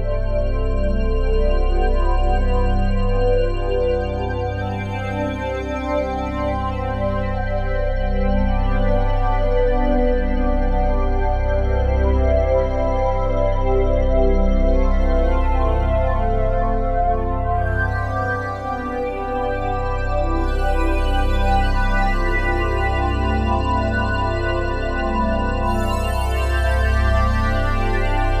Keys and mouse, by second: 4.4-6.1 drag, 6.6-8.4 drag, 9.0-10.7 alt+drag, 10.7 1, 12.4-16.8 drag, 19.0-22.2 drag, 24.3-28.4 drag.